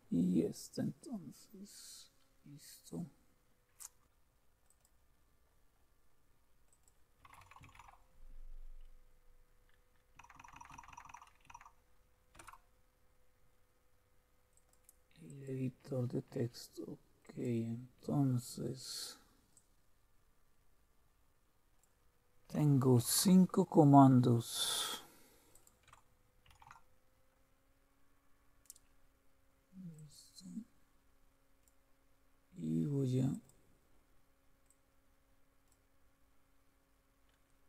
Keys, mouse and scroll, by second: 0.1-1.5 scroll up 2, 1.5 scroll up 1, 1.8-2.6 scroll down 1, 4.7 click, 6.7 click, 7.0-8.2 typing, 7.9 click, 10.2 Down, 10.4 Down, 10.5 Down, 10.7 Down, 10.9 Down, 11.1 Down, 11.5 Down, 12.4 Return, 14.5-16.4 drag, 17.2-19.2 drag, 19.5-22.8 drag, 23.0 ctrl+c, 24.6-25.9 drag, 26.5 ctrl+v, 28.3-29.2 scroll up 1, 29.2-29.9 scroll up 1, 29.9-32.5 drag, 32.8 click, 33.3 click, 33.6-37.3 drag.